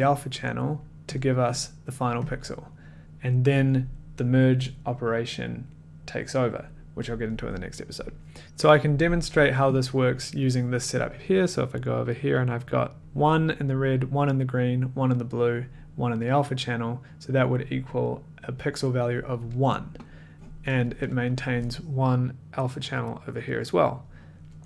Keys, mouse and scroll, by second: 0.4 click, 1.1 click, 2.1 click, 2.3 click, 3.0 click, 8.4 click, 8.4 scroll, 8.4 1, 11.3 click, 11.3 1, 22.2-24.6 ctrl+drag.